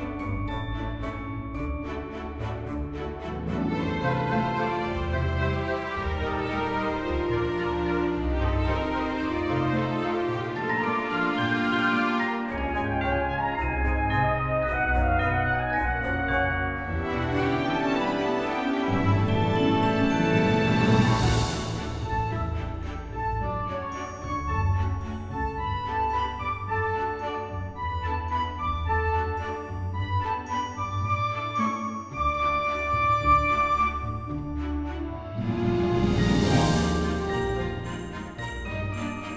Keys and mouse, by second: 0.8-2.9 typing, 1.6 click, 2.6 click, 3.7 click, 4.2 middle click, 5.1 click, 5.5-7.4 typing, 7.0 click, 8.6 click, 9.1 g, 9.3 x, 10.0 click, 10.7 middle click, 11.7 click, 12.4 g, 12.5 x, 13.1 click, 13.2 g, 13.3 z, 14.3 click, 14.6 middle click, 15.5 click, 15.9 g, 17.7 click, 17.9 g, 18.0 z, 18.7 click, 18.9 g, 19.0 x, 19.5 click, 20.3 Tab, 20.5 middle click, 21.1 click, 21.5 middle click, 22.4 click, 23.0 Tab, 23.4 middle click, 23.9 click, 24.5 alt+shift+click, 26.4 g, 26.5 z, 27.8 click, 27.9 Tab, 28.4 middle click, 30.4 shift+middle click, 31.2 Tab, 31.6 middle click, 32.0 g, 32.1 z, 32.7 click, 32.9 Tab, 33.3 click, 33.9 shift+middle click, 34.4 middle click, 36.8 F6, 38.2 shift+middle click.